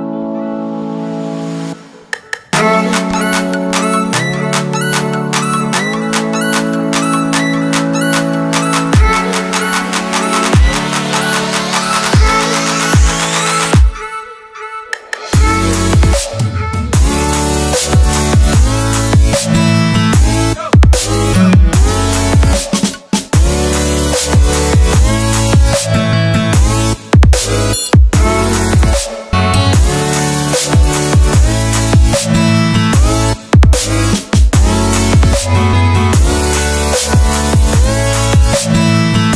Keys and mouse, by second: 0.7 n, 1.4 n, 2.6 n, 3.5 middle click, 4.4 click, 4.6 middle click, 5.3 middle click, 5.5 click, 5.6 middle click, 7.1 click, 8.8 click, 9.1 click, 9.8 shift+d, 11.5 click, 11.6 middle click, 11.8-13.7 drag, 14.9 shift+a, 18.3-19.3 drag, 19.7 click, 20.9 click, 23.8 click, 25.0 middle click, 25.4 click, 26.8-28.4 drag, 35.0 middle click, 36.0-38.1 drag.